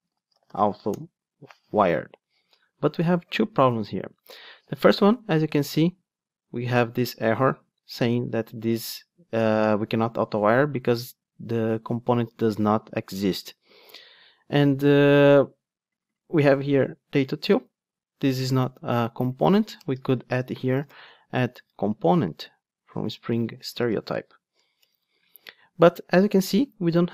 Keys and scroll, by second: 0.8 Tab, 0.9 Return, 23.8 ctrl+space, 24.9 Return.